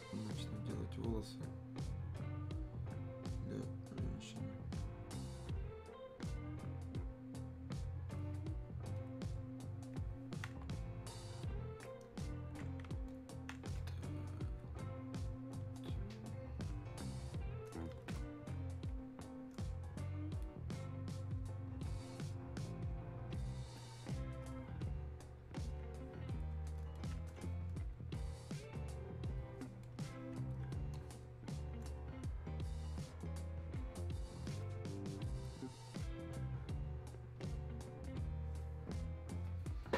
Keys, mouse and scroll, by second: 9.1 click, 13.1 click, 14.6 click, 19.1 click, 24.5 click, 27.0 click, 35.5 click.